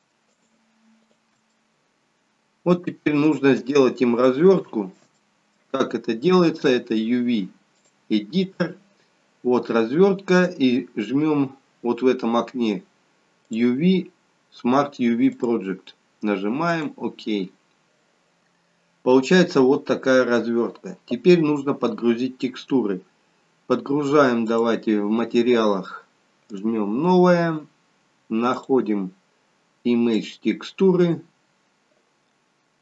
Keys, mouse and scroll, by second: 0.2 shift+click, 1.0 shift+click, 1.5 middle click, 4.1 shift+middle click, 5.1 middle click.